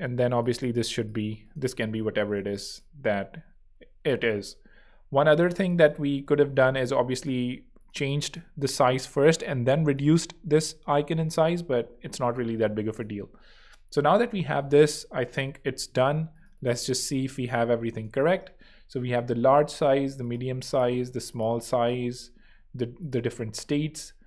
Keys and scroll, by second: 6.1 super+0, 7.0 super+z, 23.6 Escape.